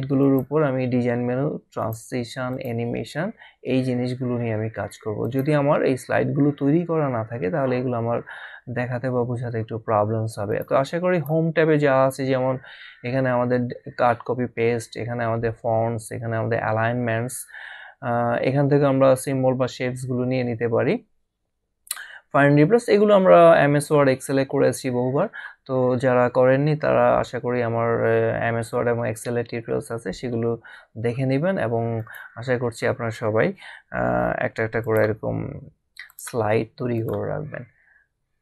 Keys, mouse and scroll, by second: 0.2 click, 1.8 click, 5.2 click, 10.6 click, 32.0 click, 34.8 click, 36.4 click, 38.1 scroll down 1.